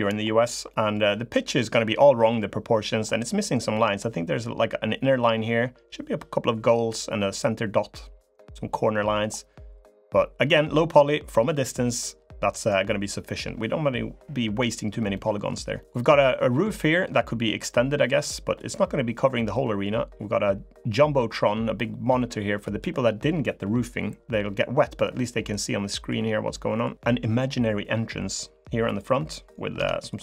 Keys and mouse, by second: 0.5 click, 9.4 click, 14.9 click, 15.5 click, 16.0 click, 17.8 middle click, 19.1 middle click, 22.3 middle click, 24.0 middle click, 24.7 click, 25.6 middle click, 26.3 click, 26.8 click, 28.6 click, 29.5 Tab.